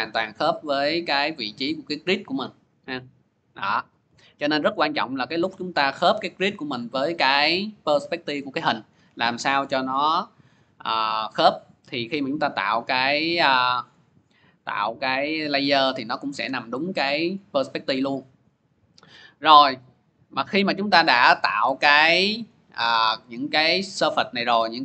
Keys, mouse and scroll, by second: 0.3 click, 1.6 click, 2.6 click, 13.4 scroll, 14.7 click, 15.1 click, 15.5 click, 15.9 click, 17.1 scroll, 17.7 scroll, 22.3 click.